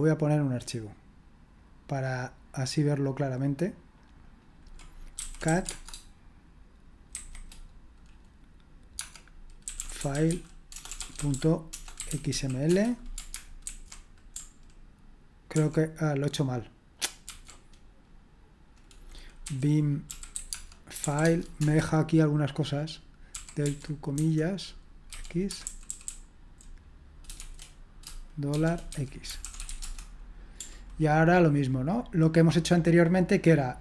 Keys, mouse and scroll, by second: 0.7 click, 1.6-3.4 drag, 4.2 click, 4.9-5.9 typing, 7.1 typing, 9.4-12.8 typing, 13.6 ctrl+alt+v, 15.5 ctrl+d, 17.0-17.8 typing, 19.4-21.5 typing, 21.5 Return, 23.3-30.1 typing, 25.5 Escape.